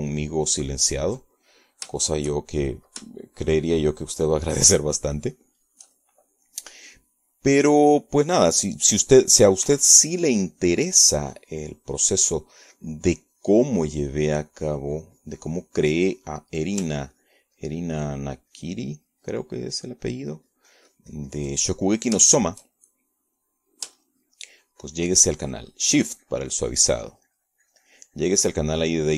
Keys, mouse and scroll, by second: 0.3 ctrl+middle click, 1.0-3.3 ctrl+drag, 3.4 ctrl+middle click, 4.0 shift+click, 5.1-8.0 shift+drag, 9.8 click, 10.4 click, 10.5 middle click, 11.6-18.6 ctrl+drag, 19.0-23.6 ctrl+drag, 24.3 ctrl+shift+click, 24.8 ctrl+shift+click, 26.0-29.1 shift+drag.